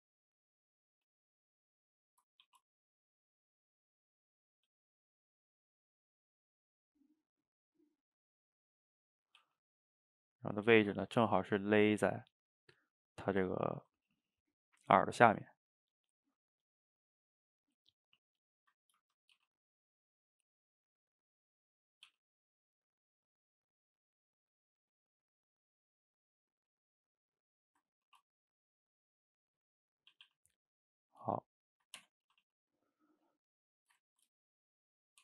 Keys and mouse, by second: 0.9 g, 1.8-2.4 middle drag, 2.4 ctrl+t, 3.9 click, 4.1 middle click, 4.6 g, 5.8-8.8 middle drag, 10.3 click, 10.5 middle click, 10.8 g, 13.4-16.7 ctrl+middle drag, 16.7 click, 16.9-18.6 middle drag, 18.6 shift+click, 18.7 middle click, 19.4 g, 21.0 middle click, 21.9 click, 22.1 g, 23.2 click, 23.3 middle click, 23.9 shift+click, 24.1 middle click, 24.5 g, 25.8 middle click, 26.6 g, 27.6 middle click, 28.1 ctrl+t, 30.0 middle click, 30.2 a, 30.3 a, 30.4-32.0 middle drag, 32.0 Tab, 32.3 a, 32.4 a, 32.6-33.3 middle drag, 33.3 click, 33.8 shift+right click, 34.1-35.2 ctrl+middle drag.